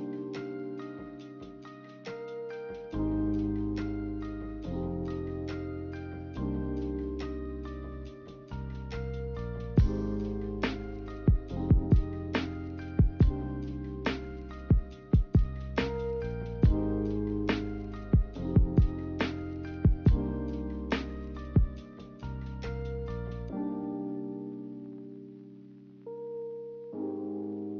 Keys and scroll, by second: 22.7-24.0 typing.